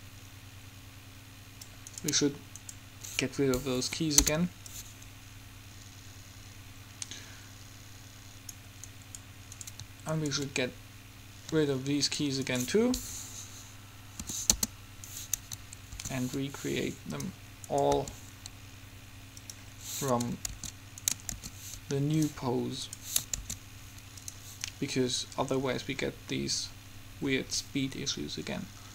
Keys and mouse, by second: 2.3-4.5 right drag, 3.9 Delete, 4.8-6.6 drag, 9.2-12.0 right drag, 12.0 middle click, 12.2-14.5 right drag, 14.5 Delete, 15.2-17.0 right drag, 16.1 shift+d, 18.1 g, 19.4 right click, 19.6 right click, 20.4-22.4 right drag, 20.7 shift+d, 21.4 shift+d, 23.6 shift+d, 24.3 right click.